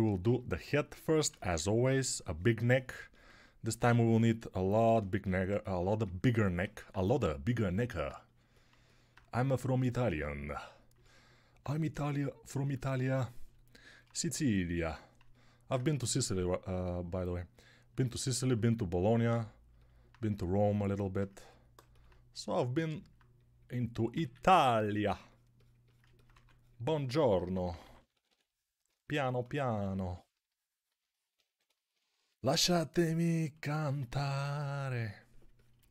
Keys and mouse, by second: 19.2-21.7 alt+drag, 24.4 ctrl+r, 26.2 2, 27.4-28.1 typing, 31.3 1, 34.0 2.